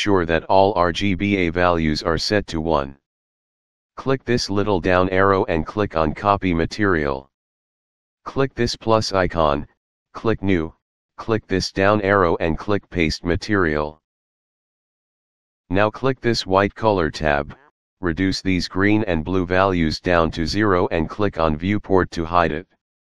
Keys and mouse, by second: 5.1 click, 7.1 click, 8.6 click, 10.1 click, 12.1 click, 13.3 click, 15.7 click, 19.9 click, 21.7 click.